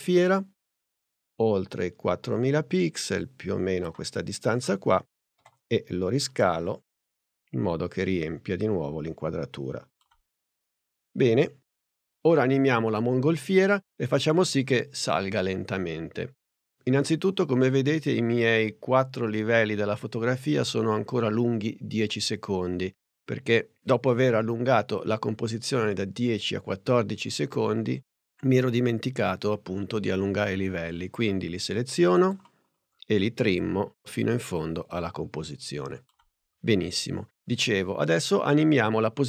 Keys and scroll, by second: 5.4 shift+s.